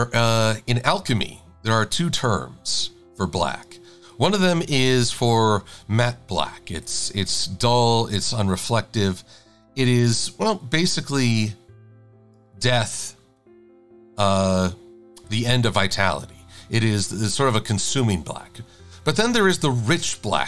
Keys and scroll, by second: 4.8 v, 17.1 a.